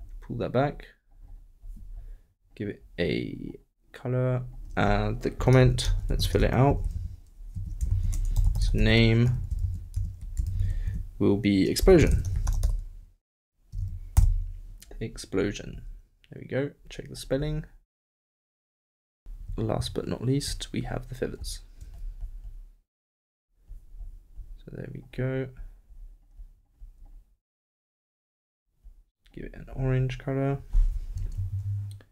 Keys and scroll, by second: 5.6 shift+BackSpace, 5.8 shift+[, 6.2 shift+Return, 6.4 shift+Return, 6.7 shift+], 6.9 shift+Left, 7.8 shift+Up, 7.9 shift+', 8.3 shift+n, 9.5 shift+BackSpace, 9.6 shift+', 9.9 shift+;, 10.5 shift+', 10.8 shift+Left.